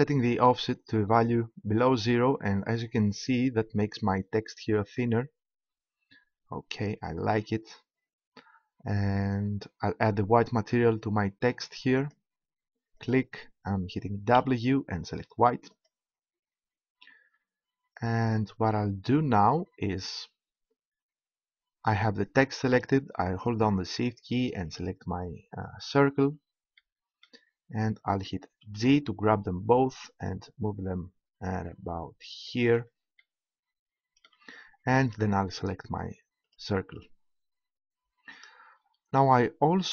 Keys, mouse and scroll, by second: 3.2-4.9 drag, 5.6-11.3 middle drag, 11.9-16.7 drag, 17.7 middle click, 18.2-19.3 drag, 24.7-26.6 right drag, 28.6 g, 32.6-33.9 drag, 36.4-38.3 right drag.